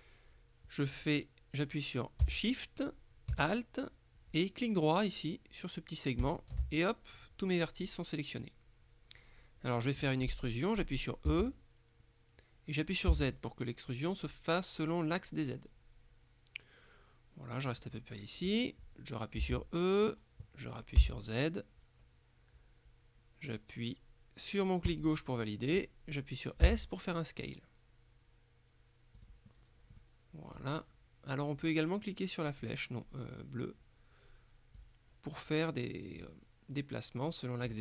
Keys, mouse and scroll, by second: 6.3 alt+shift+right click, 8.0-10.5 drag, 11.4 e, 13.2 z, 17.8 click, 19.5 e, 21.1 z, 25.0 click, 26.7 s, 29.3 click, 29.6-30.1 scroll down 1, 30.1 middle click, 32.7-35.4 drag, 36.3-37.8 drag.